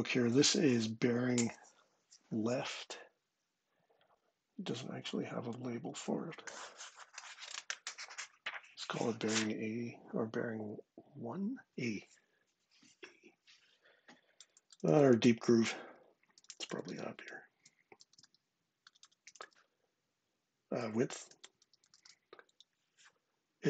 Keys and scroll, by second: 15.9-22.2 typing.